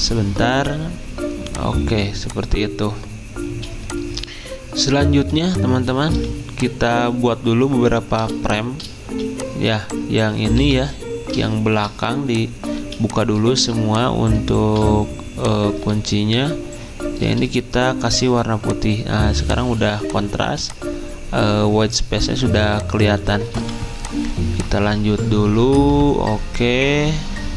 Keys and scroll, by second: 8.2 z, 10.3-11.1 typing, 11.7 ctrl+alt+2, 15.9 ctrl+z, 17.6-18.3 typing, 20.4 z, 22.6 v.